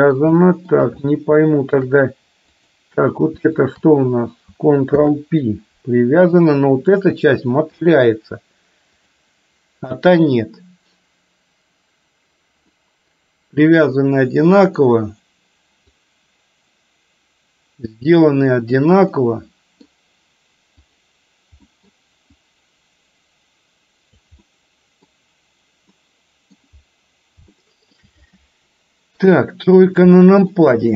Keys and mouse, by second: 0.1 middle click, 0.6 shift+middle click, 1.5 shift+middle click, 2.6 click, 3.7 shift+click, 5.0 ctrl+p, 7.0 click, 9.1 click, 12.7-14.8 middle drag, 16.1-19.0 drag, 19.2 middle click, 20.8 click, 21.7 middle click, 22.6-24.2 drag, 24.5 middle click, 26.1 middle click, 27.6 shift+middle click, 29.2 KP_3, 30.2 shift+middle click.